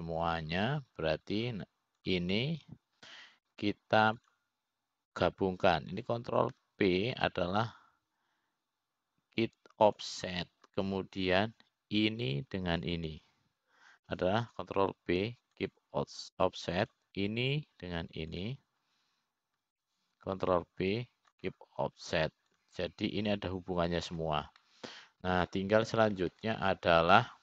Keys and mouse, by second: 0.7 click, 4.6 click, 6.8 shift+click, 9.1 ctrl+p, 13.9 click, 15.4 shift+click, 17.3 ctrl+p, 19.4 click, 21.0 shift+click, 23.1 ctrl+p, 27.2-27.4 middle drag.